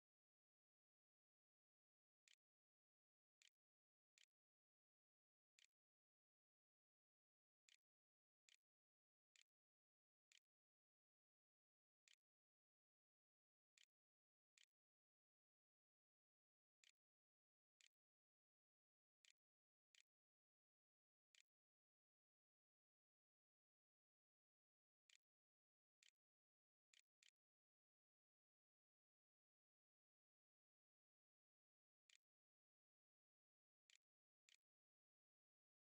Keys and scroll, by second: 0.5-18.9 typing, 19.1 Tab, 19.9-21.4 typing, 23.4-28.1 typing, 30.9-32.0 typing, 32.9 Delete, 33.3-35.9 typing, 34.1 Return.